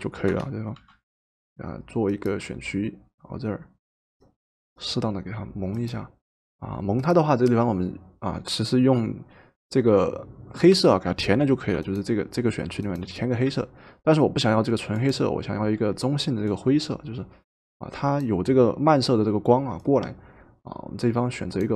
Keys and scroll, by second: 0.7 i.